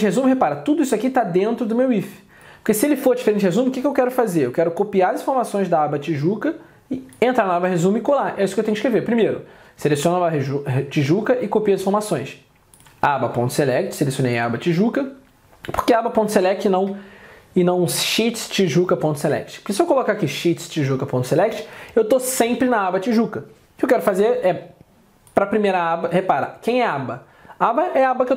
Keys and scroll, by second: 4.3 alt+Tab, 12.1 alt+Tab.